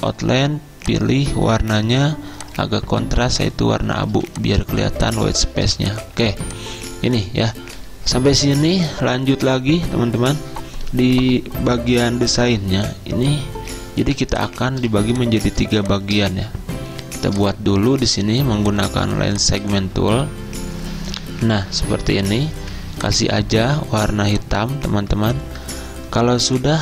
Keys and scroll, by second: 4.2 z, 5.7 v, 6.3 z, 14.9 z, 22.1-22.6 typing.